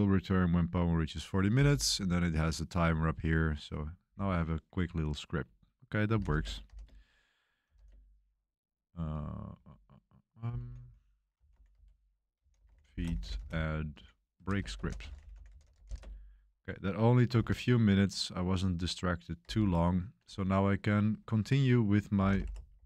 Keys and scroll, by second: 5.8-15.9 typing, 17.1-17.8 typing, 19.4 q, 21.7-22.8 typing.